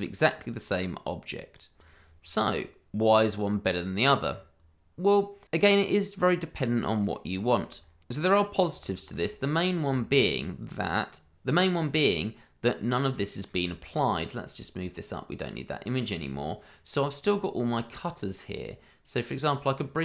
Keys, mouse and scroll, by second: 8.0 click, 8.8 shift+middle click, 8.9 middle click, 9.0 shift+middle click, 9.2-9.8 scroll up 1, 9.9 shift+middle click, 9.9 middle click, 14.3 click, 19.3 click.